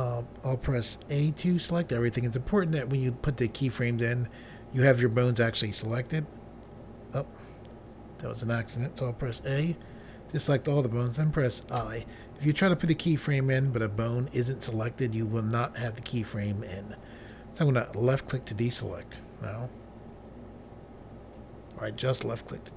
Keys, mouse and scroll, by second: 1.9 a, 5.9 click, 9.3 a, 11.8 i, 18.0 click.